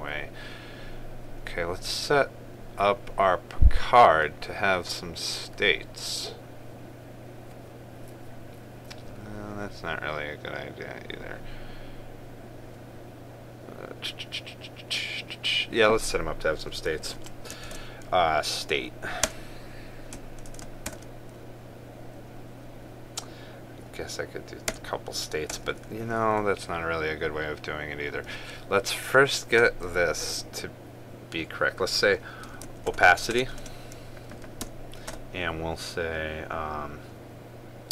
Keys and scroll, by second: 18.4 ctrl+space, 21.6 ctrl+space, 34.2 ctrl+space.